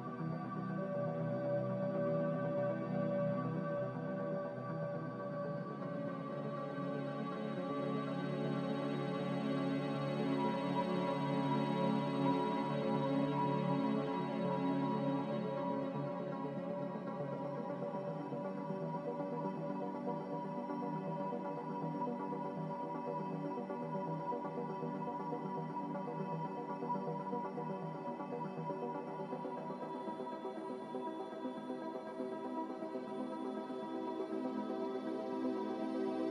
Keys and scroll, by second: 1.2 g, 6.2 z, 10.3 g, 16.5 z, 23.0 g, 32.7 z, 36.1 1.